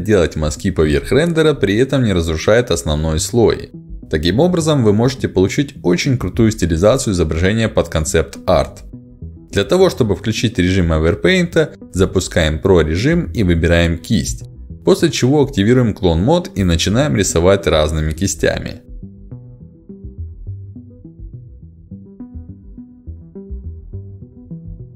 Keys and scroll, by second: 0.2 [, 0.2 d, 1.4-7.3 typing, 2.0 ctrl+z, 2.8 ctrl+z, 12.6 ctrl+s, 15.6 ctrl+z.